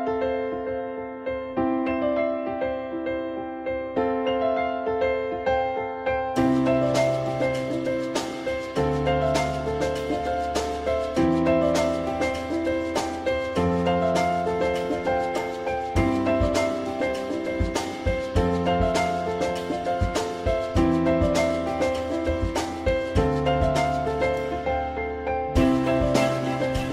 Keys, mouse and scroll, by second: 1.7 F4, 25.9 alt+middle click.